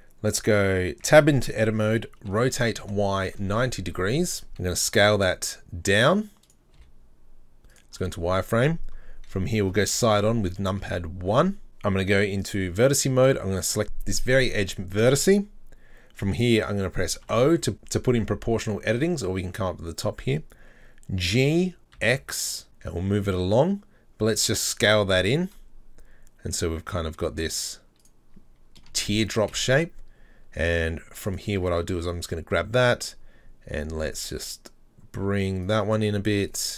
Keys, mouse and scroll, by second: 1.1 Tab, 2.3 r, 4.5 s, 7.8 z, 8.0-9.3 middle drag, 9.3 KP_3, 9.6 KP_1, 10.1-10.5 scroll up 6, 10.6-12.4 shift+middle drag, 12.4 click, 13.6 right click, 17.2 e, 17.3 o, 21.3 g, 28.3-29.1 scroll down 7, 29.1 shift+middle click, 29.4 scroll up 4, 31.3 alt+right click, 32.8 s, 36.5 alt+right click.